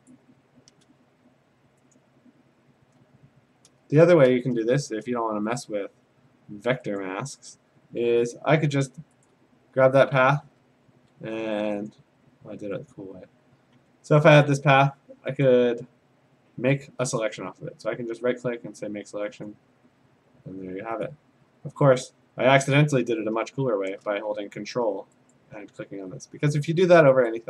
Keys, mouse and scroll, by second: 0.1 click, 0.1 a, 2.0 click, 5.6 click, 7.0 click, 9.3 ctrl+click, 10.4 ctrl+d, 11.9 click, 12.9 click, 13.8 a, 14.5 click, 15.5 right click, 17.2 click, 19.5 click, 21.1 click, 21.9 ctrl+d, 25.3 ctrl+click, 27.3 ctrl+click.